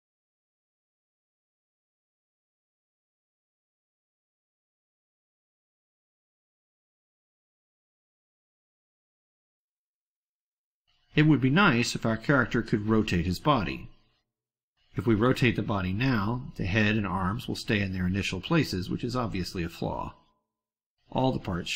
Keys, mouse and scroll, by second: 0.4 drag, 1.2 click, 1.6 click, 1.8-2.3 ctrl+drag, 2.5 click, 3.2 click, 3.5 click, 3.9 click, 4.4 ctrl+middle click, 6.5 click, 7.1 click, 7.4 ctrl+z, 8.8-10.1 ctrl+drag, 17.9-19.0 drag.